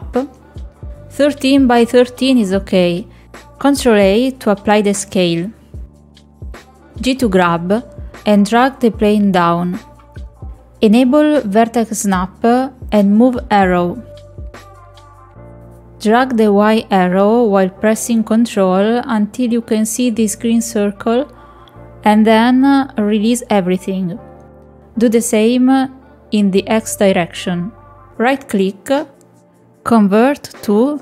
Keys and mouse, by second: 4.8 ctrl+a, 9.0 g, 11.4-12.6 drag, 13.1 click, 15.8 click, 16.2-22.9 drag, 24.4-28.4 drag, 29.1-31.0 right drag.